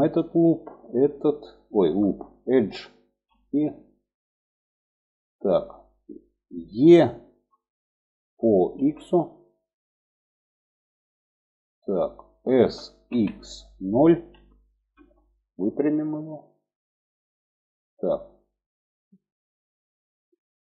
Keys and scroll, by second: 6.6 e, 11.9 s.